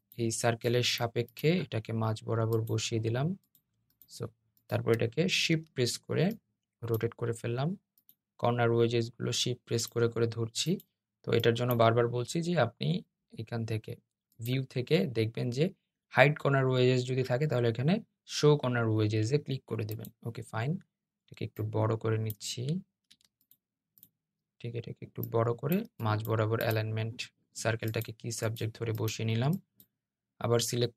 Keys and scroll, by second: 22.8 super+z.